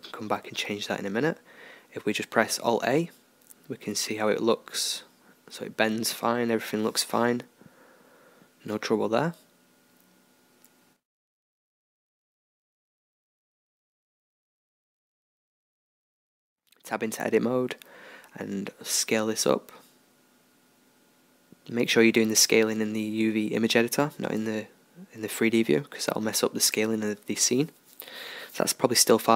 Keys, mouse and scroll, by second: 1.2 KP_0, 2.9 alt+a, 7.1-10.2 middle drag, 10.2-12.3 drag, 12.2-14.7 middle drag, 14.7-18.9 drag, 16.3 Tab, 18.9 s, 25.5 Tab, 26.0 click, 26.9 middle click, 27.7 middle click, 27.8-29.3 middle drag.